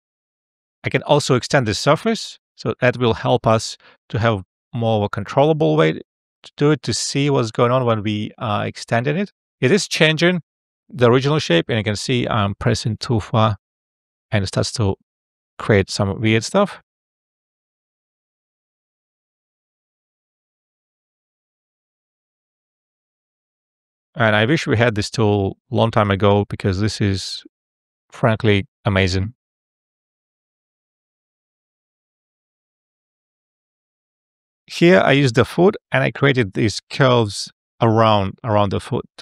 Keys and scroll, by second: 34.8 alt+f.